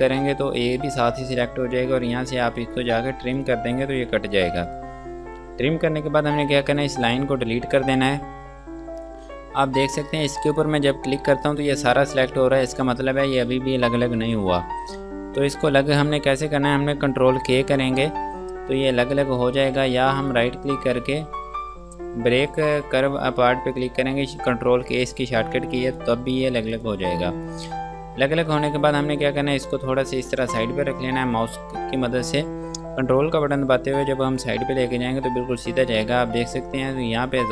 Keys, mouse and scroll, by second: 0.9-2.2 scroll down 1, 3.6 click, 5.6 scroll up 1, 7.1 click, 7.6 scroll down 1, 8.7 Delete, 11.3 click, 16.7 ctrl+Num_Lock, 17.7 ctrl+k, 19.4 click, 20.2 ctrl+z, 20.6 right click, 26.1 click, 33.4 ctrl+click, 36.1 scroll up 1.